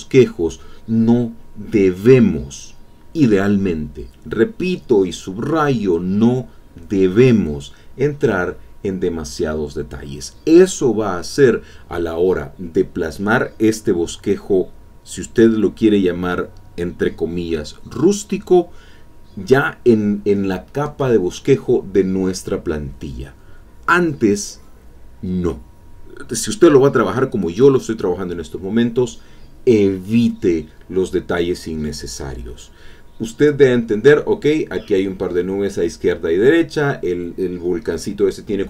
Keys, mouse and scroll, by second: 0.3 shift+click, 1.0-6.7 drag, 7.6 click, 8.3-11.5 drag, 12.1-15.4 drag, 15.5-19.3 drag, 19.4 click, 23.0 click, 23.8 click, 27.7 click, 28.0-32.4 drag, 32.9-36.8 drag.